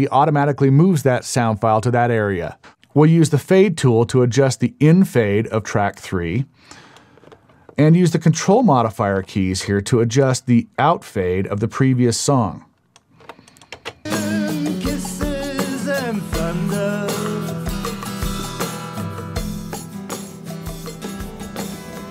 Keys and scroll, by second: 13.8 space.